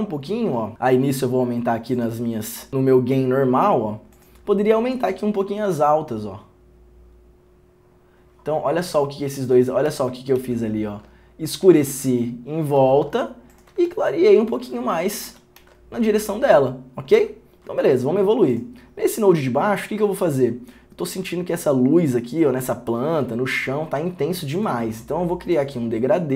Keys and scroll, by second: 10.2 ctrl+d, 10.6 ctrl+d, 12.1 ctrl+d, 13.0 ctrl+d, 14.6 ctrl+d, 15.4 ctrl+d, 15.8 ctrl+d.